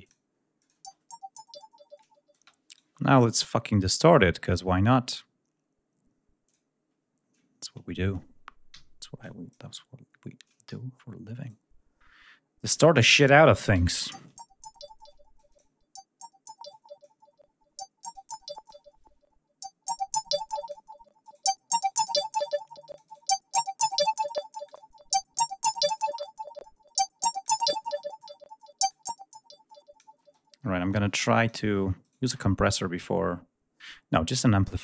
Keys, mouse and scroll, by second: 2.2 space, 2.5 right click, 3.9-4.6 scroll down 2, 6.3 click, 9.1 click, 10.5 r, 11.3-12.7 drag, 13.6 l, 15.2 click, 16.5 click, 17.9 right click, 18.3 click, 19.4-20.7 drag, 21.1 right click, 21.6 right click, 22.7 click, 24.5 click, 25.8-27.5 drag, 28.7-30.0 drag, 30.0 space, 30.7 click, 31.8 right click.